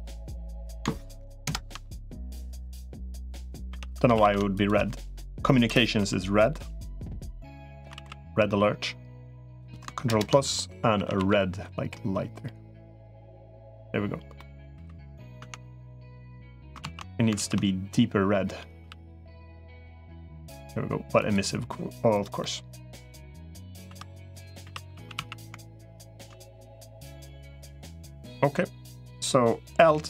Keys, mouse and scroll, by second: 1.4 ctrl+KP_Add, 2.6 click, 3.6 3, 3.8 3, 4.0 a, 4.4 alt+shift+click, 5.8 i, 7.8 alt+s, 10.0 ctrl+KP_Add, 10.8 a, 11.0 g, 14.2 middle click, 14.6 3, 15.2 Tab, 15.9 middle click, 16.8 ctrl+z, 17.4 ctrl+z, 18.6 g, 22.2-23.5 middle drag, 23.8 2, 24.6 3, 24.8 a, 25.0 a, 26.3-28.3 middle drag, 29.6 l.